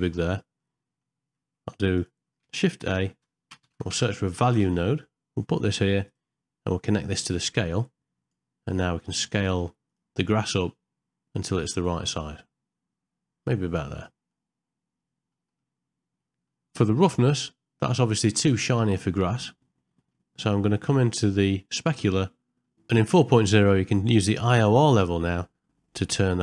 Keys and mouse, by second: 0.6 middle click, 2.0 click, 2.8 shift+a, 7.4 click, 7.7 click, 9.0 click, 10.6-13.7 drag, 14.3-15.3 middle drag, 15.5 middle click, 16.2 middle click, 17.1 middle click, 18.2-20.0 middle drag, 21.7 click, 22.3 middle click, 24.8-26.4 drag.